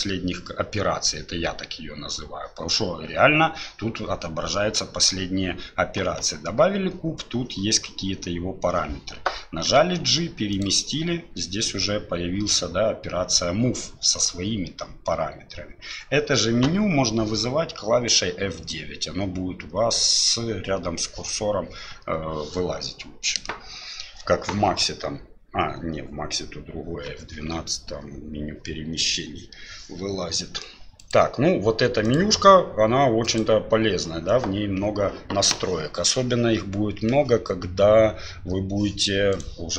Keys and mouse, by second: 9.8 g, 17.9 F9, 19.6 F9, 20.7 F9, 21.9 F9, 31.0 click, 32.0 click, 33.2 click, 39.3 click.